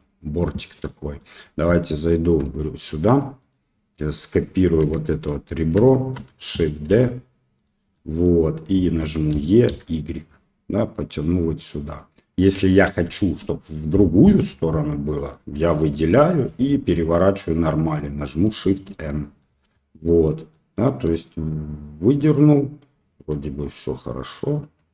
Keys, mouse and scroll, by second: 0.8 middle click, 1.9 click, 2.4 Tab, 3.4 click, 4.8 2, 5.1 click, 5.8 shift+middle click, 6.8 shift+d, 7.9 middle click, 9.3 e, 12.6 middle click, 13.1 shift+middle click, 15.0 middle click, 15.9 l, 18.6 shift+n, 19.3 middle click, 20.5 middle click, 22.3-23.3 middle drag, 24.7-24.9 drag.